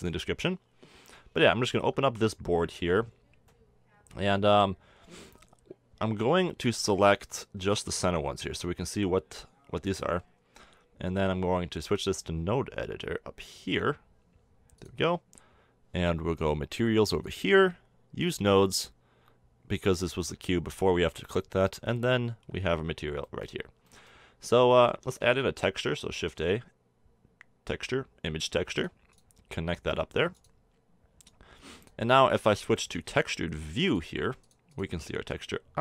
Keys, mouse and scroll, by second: 1.6 middle click, 5.2 a, 7.6 b, 11.7-13.6 drag, 17.2-20.2 drag, 20.6 n, 23.8 click, 24.2-26.7 middle drag, 25.2 shift+a, 29.8-32.5 drag.